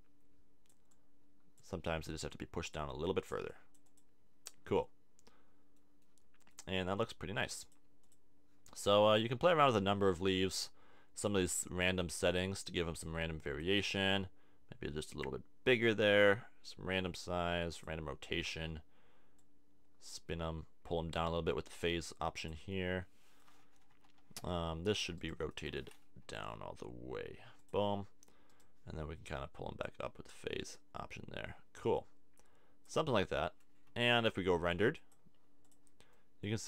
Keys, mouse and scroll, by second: 8.7 middle click, 21.3-22.7 middle drag, 23.9 KP_1, 24.6 KP_3, 25.3-27.1 right drag, 26.2 r, 29.6 click, 33.1-34.9 middle drag, 36.2 middle click.